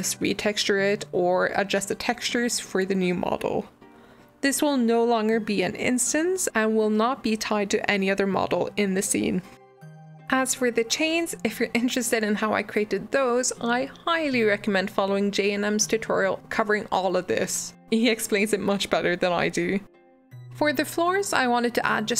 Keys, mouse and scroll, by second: 0.0-4.2 middle drag, 10.0 Tab, 10.4 click, 10.8 g.